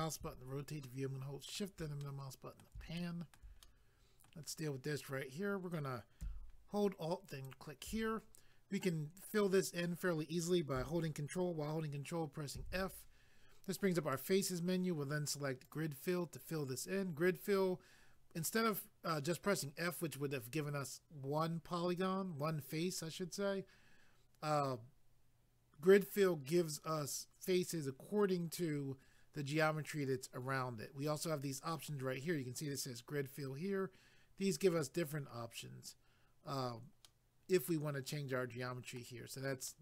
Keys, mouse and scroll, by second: 0.9 shift+middle click, 2.0 middle click, 3.0 shift+middle click, 3.6 middle click, 7.3 alt+click, 12.6 ctrl+f, 15.6 click, 15.7 click, 37.0 middle click, 39.7 middle click.